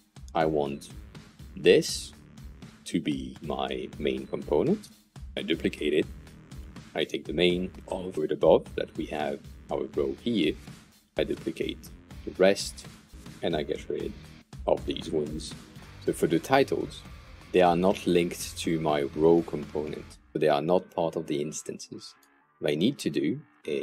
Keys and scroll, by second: 5.7 super+d, 11.1 super+d, 14.7 Delete, 15.7 super+z.